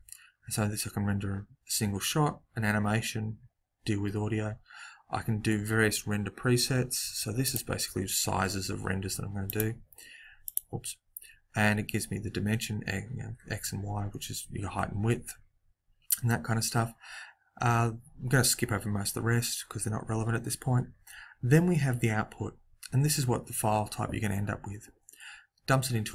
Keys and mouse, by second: 7.5 click, 9.4-12.1 drag.